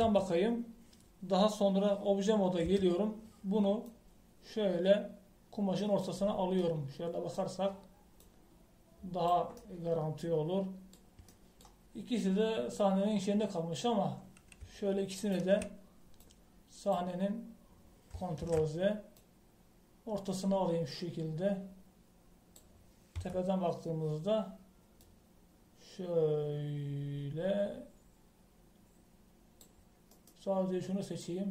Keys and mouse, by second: 1.0 KP_7, 3.6 Tab, 7.3 middle click, 9.2 click, 10.7 click, 16.2-17.2 right drag, 17.2 middle click, 17.4 click, 17.4 right click, 19.4 ctrl+z, 24.1 KP_7, 26.0-27.9 drag, 31.1-31.5 right drag.